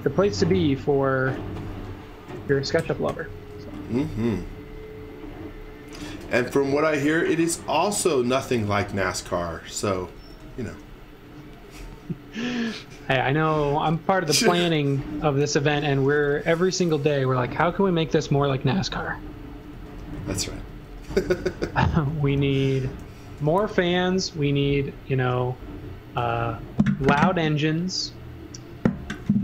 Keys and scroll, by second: 2.0-3.1 typing, 7.2 e, 8.9 x, 9.2 v, 10.3 x, 10.6 v, 11.8-13.5 typing, 14.7-21.5 typing, 22.5-24.0 typing.